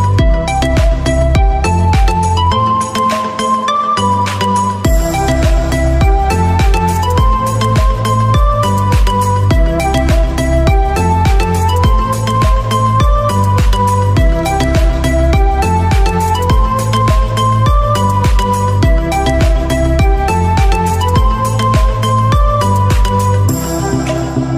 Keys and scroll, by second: 13.6 ctrl+z, 14.6 ctrl+z, 19.4 ctrl+z, 23.4 ctrl+z, 23.8 ctrl+shift+i.